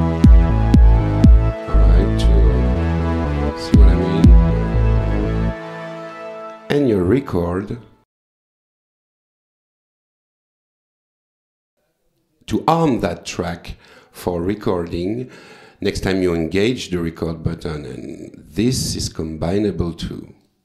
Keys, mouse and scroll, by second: 0.5 click, 1.4 s, 3.0 s, 4.6 s, 5.7 click, 6.1 space, 7.8 click, 9.1 click, 10.1 click, 11.3 click, 18.2 click, 19.6 click, 20.4 click.